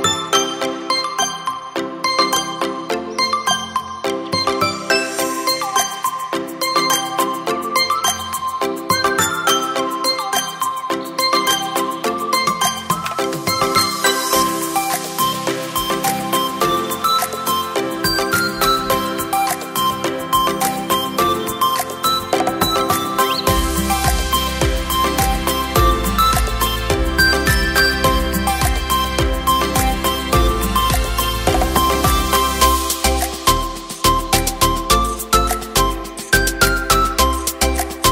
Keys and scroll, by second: 3.2 typing, 3.4 Return, 6.0 typing, 6.2 Return, 10.1 v, 13.8 space, 21.4 ctrl+a, 21.6 ctrl+v, 31.3 v, 32.3 Up, 32.4 Up, 35.1 space.